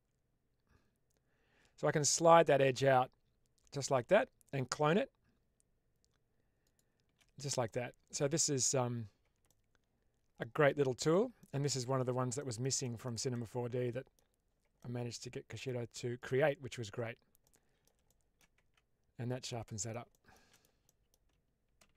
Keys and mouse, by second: 6.7 shift+click, 7.5 middle click, 8.3 shift+middle click, 9.4-11.0 middle drag, 11.3 shift+middle click, 12.3 middle click, 12.7 shift+middle click, 13.2 middle click, 14.7 middle click, 16.1 click, 17.3 middle click, 18.1 shift+middle click, 18.5 Tab, 19.3-19.8 middle drag, 20.0 middle drag, 20.4 middle click, 20.7 middle click, 21.7 shift+space.